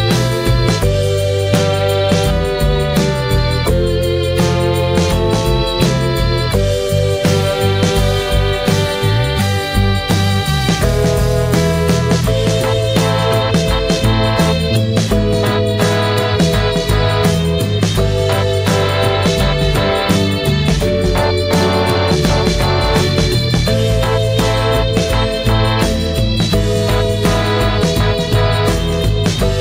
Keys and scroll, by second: 20.5 ctrl+j.